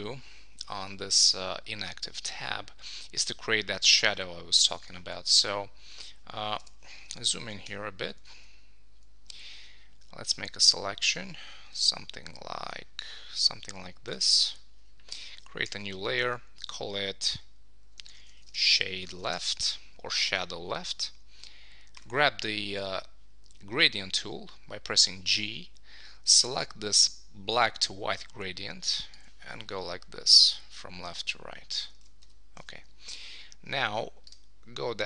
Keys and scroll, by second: 7.7 super+=, 15.7 shift+super+n, 18.1 shift+super+n, 19.3 Return, 32.0 super+d, 32.6 super+s.